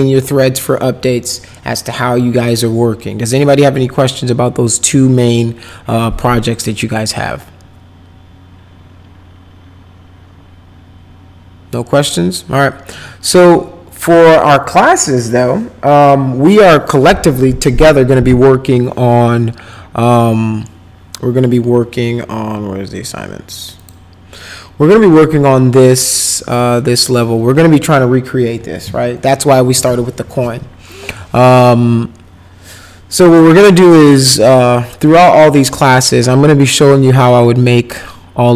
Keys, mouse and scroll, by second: 23.8 click, 26.9 click.